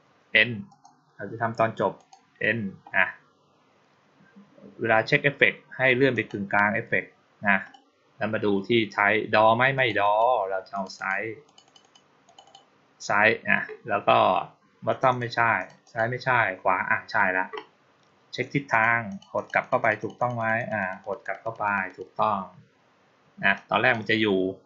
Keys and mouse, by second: 0.5 click, 1.8 click, 6.0 click, 7.5 click, 9.6 click, 9.9 click, 10.6 click, 10.8 click, 11.3 click, 11.5 click, 11.7 click, 12.1 click, 12.3 click, 14.8 click, 15.0 click, 15.4 click, 15.7 click, 18.6 click, 18.9 click, 19.2 click, 19.5 click, 19.7 click, 19.8 click, 20.0 click, 20.2 click, 20.4 click, 20.6 click, 20.9 click, 21.1 click, 21.3 click, 21.5 click, 21.7 click, 23.4-23.8 drag.